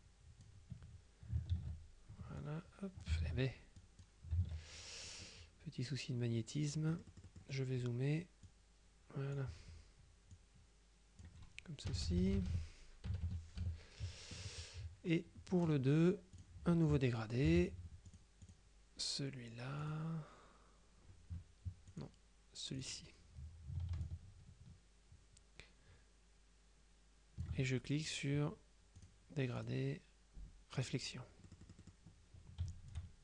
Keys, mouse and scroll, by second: 1.6 ctrl+z, 2.5 click, 3.3 ctrl+z, 3.9 ctrl+click, 4.5 ctrl+z, 7.0 click, 8.5 click, 10.4 click, 12.0 KP_Subtract, 13.4 KP_Multiply, 13.7 KP_Subtract, 15.6 click, 16.5 click, 17.6 g, 18.1-19.1 drag, 19.9 click, 22.0 click, 22.9 click, 24.1-28.0 ctrl+shift+drag, 29.1 click, 29.7 click, 30.9 click, 31.5 middle click, 33.0-33.2 ctrl+shift+drag.